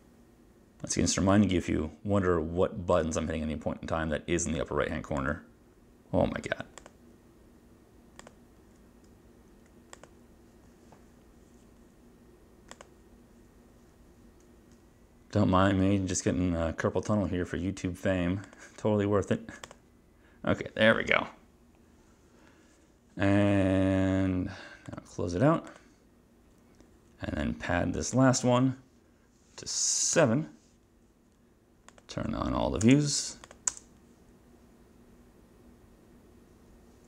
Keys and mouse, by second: 1.2 click, 1.4 click, 3.1 click, 4.6 click, 5.3 click, 6.9 click, 8.3 click, 10.1 click, 12.9 click, 18.6 click, 19.8 click, 25.0 click, 25.8 click, 28.2 click, 29.8 7, 30.2 Return, 32.0 click, 32.9 space, 33.5 click, 33.8 space.